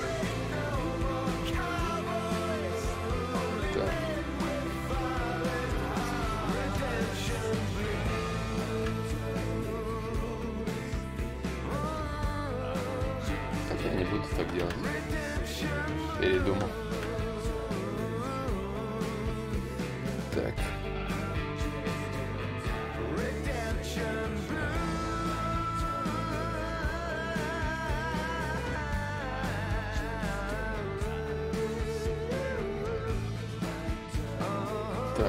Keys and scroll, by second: 0.3 i, 1.0 n, 1.8 s, 2.9 s, 4.4 ctrl+y, 4.4 ctrl+z, 6.8 d, 7.0 d, 12.7 ctrl+z, 13.0 ctrl+z, 13.5 ctrl+y, 13.6 ctrl+z, 17.2 d, 17.4 d.